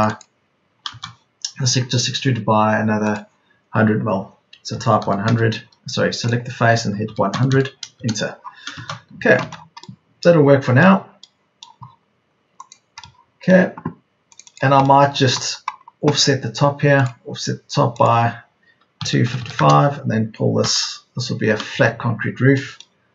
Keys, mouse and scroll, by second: 0.5 Escape, 4.7 KP_1, 4.9 KP_0, 7.0 KP_1, 7.2 KP_0, 8.9 space, 9.1 Escape, 18.9 Escape, 19.0 KP_2, 19.3 KP_5, 20.5 p, 21.9 Escape.